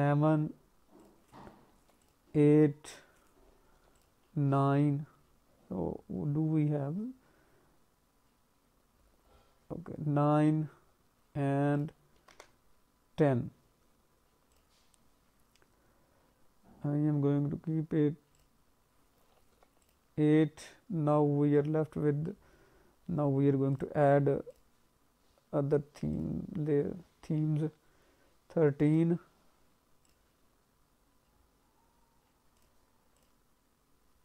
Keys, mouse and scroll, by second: 0.9 click, 2.8 click, 5.1-5.5 scroll up 2, 8.9-10.3 scroll down 3, 10.3-11.4 scroll down 1, 11.4-11.7 scroll down 1, 11.7 click, 18.3 click, 20.1-21.2 scroll down 1, 21.2 scroll down 1, 22.0-23.0 scroll up 5, 23.0-23.9 scroll down 3, 23.7 click, 25.1-25.7 scroll down 2, 26.1 click, 26.6-28.4 scroll down 6, 28.8 click, 30.9-31.9 scroll down 3, 31.9-32.5 scroll down 2, 32.5 click, 32.5-33.1 scroll down 1, 33.1 click, 34.0-34.2 scroll down 6.